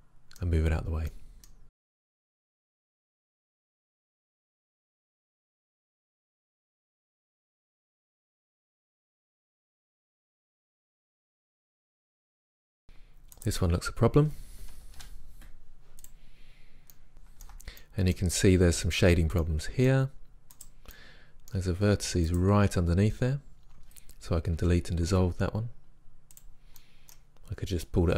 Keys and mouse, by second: 1.9-2.2 right drag, 2.0-6.2 typing, 2.5 drag, 2.8 right drag, 3.1 click, 3.3 middle click, 3.4 right click, 6.7-7.7 drag, 8.3 click, 8.7 g, 9.4 g, 9.9 click, 10.8 click, 10.8 g, 11.3 g, 11.7 g, 12.0-12.5 drag, 12.0 middle drag, 12.0 right drag, 15.0 Delete, 20.6 right click, 21.0-22.4 middle drag, 22.8-24.1 middle drag, 24.6 Delete.